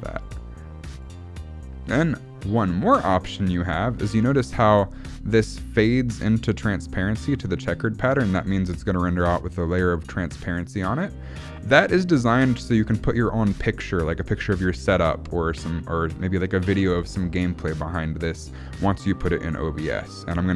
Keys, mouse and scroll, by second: 0.2 click, 0.9 click, 4.4-4.8 scroll up 1, 4.8 shift+middle click.